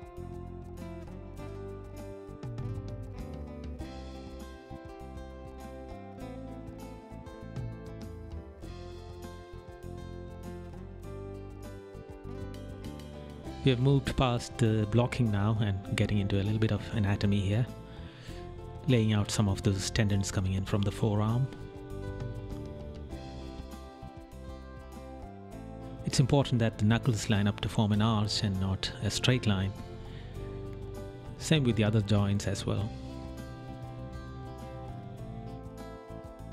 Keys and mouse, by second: 6.3 right click, 7.0 right click, 7.9 right click, 8.4 right click, 9.7 right click, 12.2 right click, 12.8 right click, 13.8 right click, 15.1 right click, 16.1 right click, 17.3 right click, 18.2 right click, 29.8 right click, 31.8 right click, 32.9 right click, 34.3 right click.